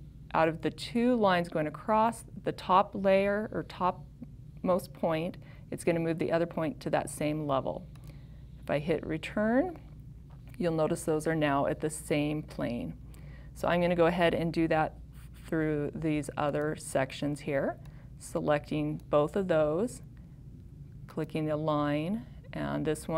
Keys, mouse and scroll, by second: 8.1 click.